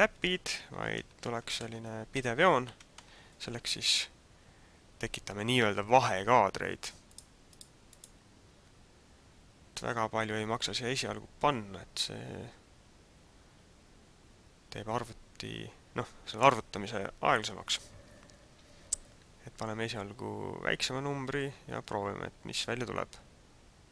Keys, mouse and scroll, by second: 0.0 Right, 0.2 Right, 0.6 Right, 1.0 Right, 1.2 Right, 1.6 Right, 2.1 Right, 2.7 Right, 3.0 Right, 7.1 click, 7.6 click, 7.9 click.